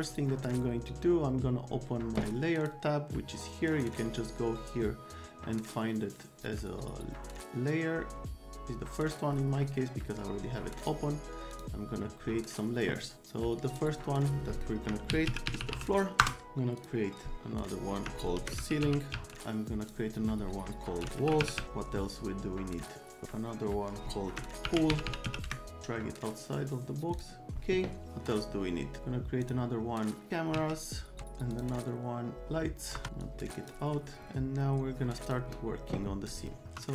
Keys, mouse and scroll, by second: 0.0 right click, 2.6 click, 3.7 right click, 10.8 click, 11.5 click, 13.7 middle click, 14.9-16.2 typing, 16.8 click, 18.1-19.6 typing, 19.8 click, 20.8-22.1 typing, 24.4-25.8 typing, 27.2 click, 28.1 click, 29.4 click, 30.5 s, 31.5 click, 33.0 BackSpace, 33.2 click, 35.3 click, 36.3 click, 36.6 F3.